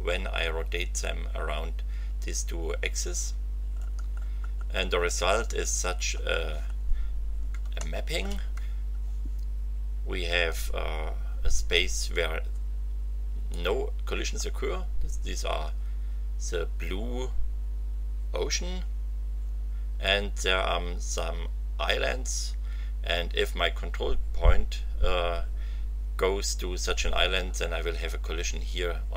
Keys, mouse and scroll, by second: 3.7-4.8 scroll down 4, 5.9-6.2 scroll down 2, 6.6-7.7 scroll up 2, 7.8 shift+click, 13.6 click.